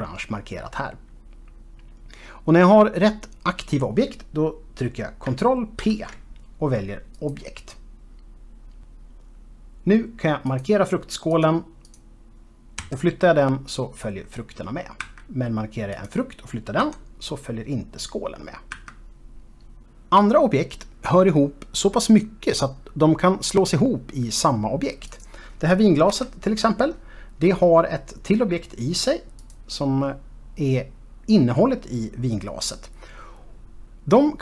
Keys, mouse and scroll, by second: 6.2 ctrl+p, 7.5 click, 10.8 click, 11.6 click, 12.2 click, 13.2 g, 15.4 Escape, 16.3 click, 17.2 g, 19.1 Escape, 25.2 click, 26.2 KP_Decimal, 27.6 middle click, 29.5 click, 31.3 scroll down 1.